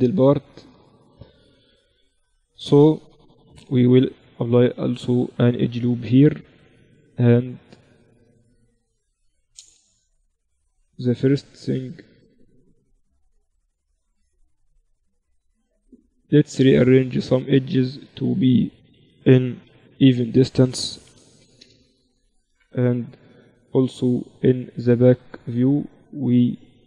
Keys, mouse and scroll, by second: 1.2-2.8 right drag, 1.6 Tab, 2.2 z, 2.8 z, 4.0 ctrl+r, 9.7 z, 11.0-12.5 middle drag, 12.5-14.6 right drag, 14.2 middle click, 14.6-16.6 drag, 16.4-18.2 right drag, 17.2-19.0 drag, 19.0 s, 20.3-22.0 right drag, 21.0 s, 23.0 ctrl+KP_1, 24.8-26.2 middle drag, 26.2 right click, 26.6-26.8 middle drag.